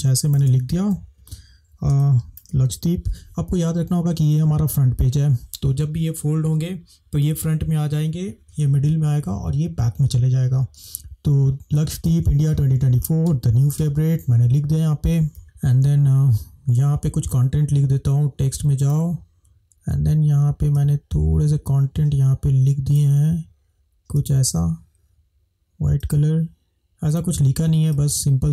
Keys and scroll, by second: 1.1 -, 2.0 space, 10.8 space.